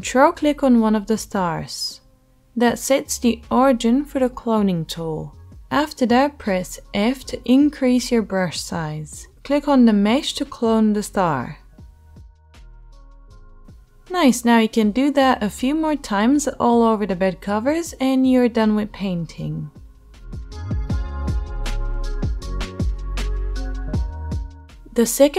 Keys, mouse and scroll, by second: 0.0 f, 0.5-2.7 alt+right drag, 2.7-8.2 middle drag, 5.9 f, 8.2-10.7 drag, 10.7-18.9 middle drag, 21.2 ctrl+z.